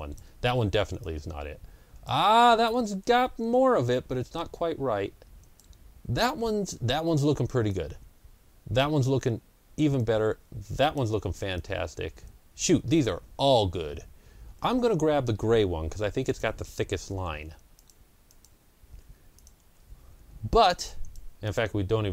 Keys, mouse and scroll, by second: 0.3 Delete, 3.4 Delete, 16.1-17.6 drag, 17.2 Delete, 18.2 click, 18.8 Delete, 19.2 click, 19.5 Delete, 20.8 click, 21.3 click.